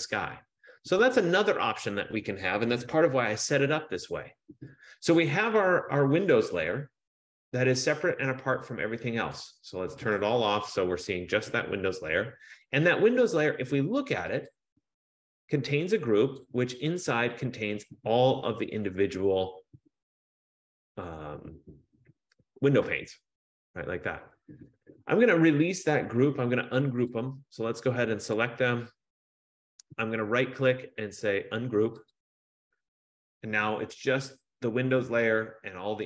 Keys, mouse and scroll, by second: 9.5 click, 10.3 click, 14.7 click, 16.6 click, 28.4 click, 30.6 right click, 32.2 click.